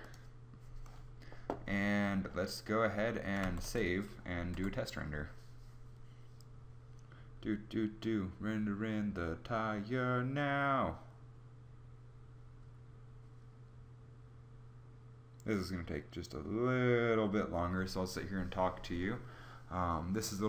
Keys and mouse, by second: 2.9 ctrl+s, 4.1 F12.